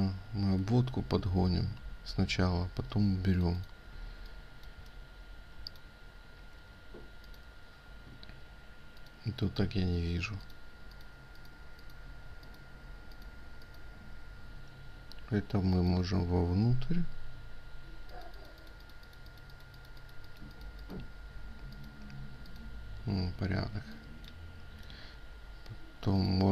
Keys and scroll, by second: 0.8 ctrl+z, 1.5 ctrl+z, 3.1 ctrl+z, 3.1 ctrl+space.